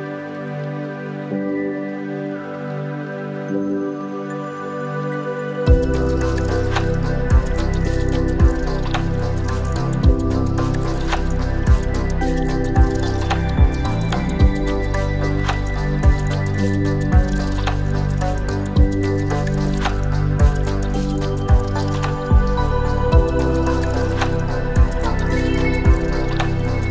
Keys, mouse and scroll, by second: 0.5-2.6 drag, 3.0-5.2 middle drag, 6.0 Tab, 6.4-7.4 scroll down 1, 7.4 KP_1, 8.1-9.0 scroll down 1, 11.6 Tab, 12.6-13.1 scroll up 3, 13.1 shift+middle click, 14.3-15.1 scroll up 3, 15.1 click, 16.5 click, 17.8 g, 18.7-21.1 scroll down 12, 23.7 click, 26.0 alt+s.